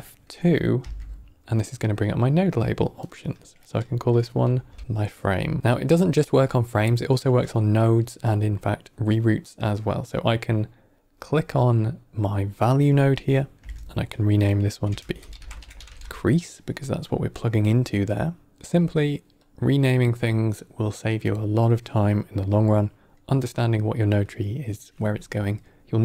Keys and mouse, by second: 0.7 F2, 5.6 ctrl+middle click, 10.9 click, 13.6 F2, 18.7 click, 19.3 click, 19.8 click.